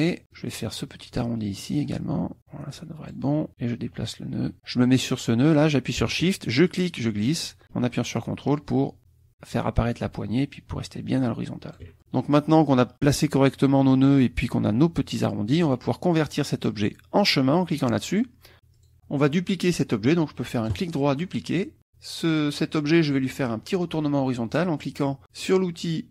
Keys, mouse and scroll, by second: 1.8-3.3 drag, 4.0 click, 6.7-11.9 shift+drag, 17.7 click, 18.7 click, 20.7 right click, 21.6 click.